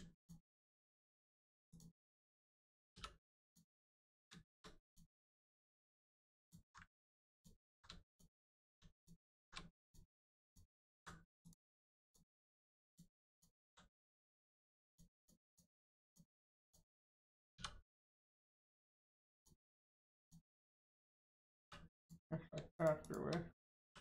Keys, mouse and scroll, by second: 0.1 alt+click, 1.7 click, 2.1-2.9 scroll up 1, 2.9 3, 3.4 click, 4.8 ctrl+click, 6.3 alt+click, 7.3 alt+shift+click, 8.0 alt+click, 8.9 alt+shift+click, 9.8 shift+click, 10.4 alt+click, 11.4 click, 12.8 alt+click, 13.3 alt+click, 14.3 shift+click, 14.8 shift+click, 15.1 shift+click, 15.4 shift+click, 15.7 shift+click, 16.0 shift+click, 16.5 shift+click, 17.0 click, 17.1 middle click, 17.5 2, 18.1 click, 19.3 shift+click, 21.9 click, 22.3 scroll down 1, 22.7 shift+click, 23.0 shift+click, 23.8 ctrl+e.